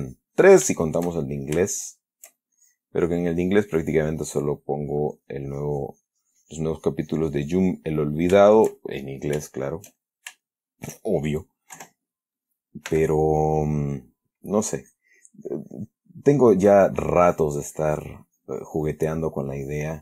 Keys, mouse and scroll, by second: 0.1 shift+click, 1.1-1.5 shift+middle drag, 2.0-2.6 shift+middle drag, 2.9 shift+click, 3.3-4.6 shift+drag, 4.7-5.2 middle drag, 5.5-8.6 drag, 8.7-9.6 shift+middle drag, 9.8-11.2 shift+middle drag, 12.1 3, 13.2 f, 14.6 click, 15.1 click, 16.5-20.0 drag.